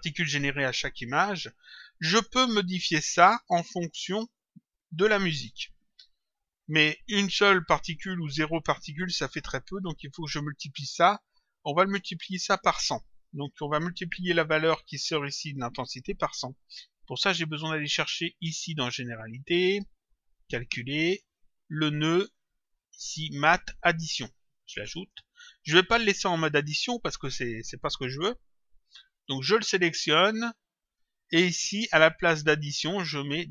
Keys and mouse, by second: 4.2 click, 13.6 click, 21.0 click, 23.3 click, 26.3 click, 28.3 click, 30.1 click.